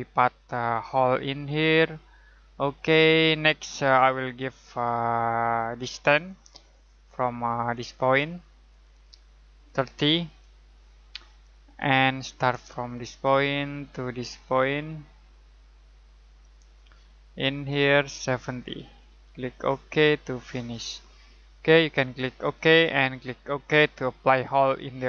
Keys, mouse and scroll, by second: 4.4 click, 9.6-10.2 typing, 11.4 click, 16.2 click, 18.7-19.1 typing, 20.3 click.